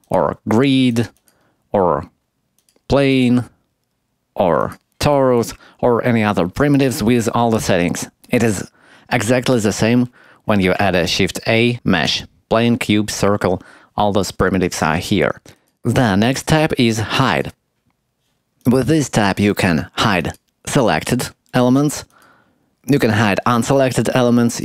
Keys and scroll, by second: 10.8 shift+a.